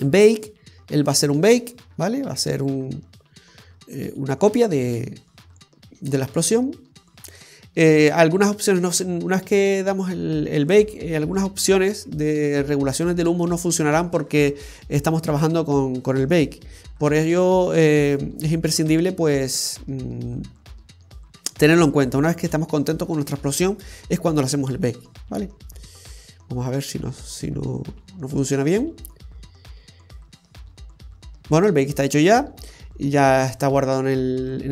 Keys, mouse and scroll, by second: 33.8 click.